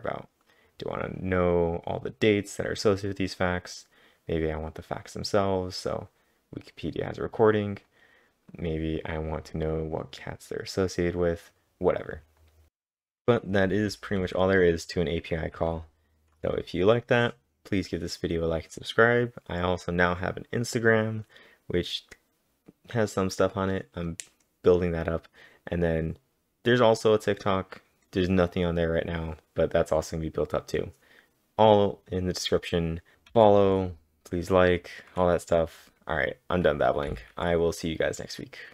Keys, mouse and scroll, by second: 1.5 click, 1.5 scroll up 1, 3.3-4.5 typing, 4.0-8.5 drag, 4.0-4.9 scroll down 1, 7.6-8.4 typing, 8.5 click, 10.2-10.6 scroll down 1, 12.4 click, 13.9 click, 13.9 typing, 15.6 k, 33.1-34.1 typing, 35.7 typing, 37.1 typing.